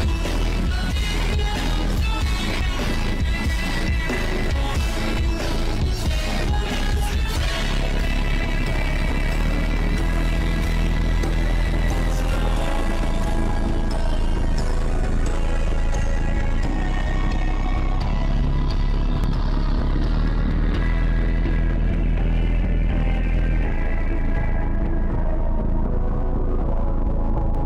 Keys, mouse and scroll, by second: 0.0 ctrl+z, 0.0-1.8 drag, 1.8 shift+`, 3.4 shift+`, 4.2 click, 4.3 shift+`, 5.9 click, 6.5 ctrl+z, 6.6 click, 7.2 shift+`, 8.4 shift+`, 9.0-10.4 drag, 10.4 ctrl+z, 10.4-12.0 drag, 12.0 shift+`, 12.8 click, 13.0 click, 13.3 click, 14.7 ctrl+z, 15.0 click, 15.8 shift+`, 16.6 shift+`, 17.1 click, 17.9 shift+`, 19.9 click, 20.3 click, 21.4 click, 21.7 click, 21.8 shift+`, 22.4 click, 23.2 shift+`, 25.1 click, 25.6-26.9 drag.